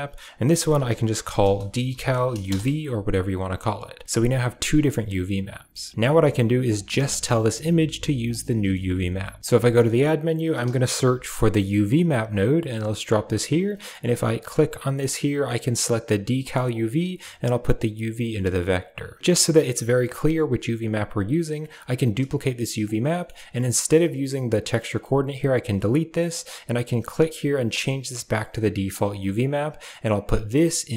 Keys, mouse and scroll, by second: 0.6-2.3 shift+drag, 5.4 right click, 5.5 click, 5.6 right click, 5.6 click, 5.9 middle click, 6.5 click, 6.7 g, 8.4 middle click, 9.5 shift+a, 13.7 middle click, 14.2-15.9 right drag, 15.9-16.6 drag, 17.5 click, 17.7-19.0 drag, 21.4 click, 21.8 shift+d, 22.9 middle click, 23.6 click, 24.5 middle click, 25.9 x, 26.1 drag, 27.0-28.9 drag, 29.2 click, 30.4-30.9 drag.